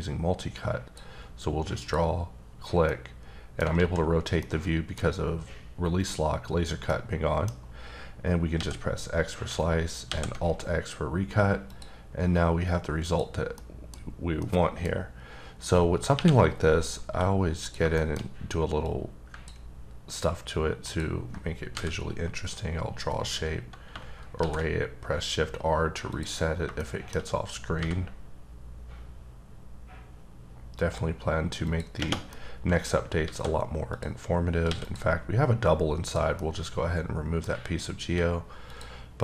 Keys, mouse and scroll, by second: 1.8 click, 2.9 middle click, 3.7 alt+z, 4.4 middle click, 6.9 middle click, 8.5 x, 10.3 x, 11.7 click, 13.0 click, 13.6 middle click, 13.9 scroll up 2, 14.4 middle click, 15.0 scroll up 1, 15.5 scroll down 2, 16.1 KP_1, 16.8 scroll up 3, 17.0 d, 17.6 click, 17.9 shift+middle click, 18.2-18.8 scroll up 1, 18.8 click, 20.8 ctrl+double click, 21.7 v, 23.3 scroll down 1, 23.9-24.4 shift+scroll down 1, 24.4 shift+r, 26.1 click, 26.4 scroll down 3, 26.8 middle click, 27.8 v, 29.3 scroll up 2, 31.6 click, 32.3 middle click, 33.2 alt+a, 33.9 click, 34.6 x, 34.8 click, 35.5 scroll down 3, 36.0 click, 36.3 scroll down 1, 36.4 middle click, 37.5 scroll up 3, 38.0 d, 38.6 click.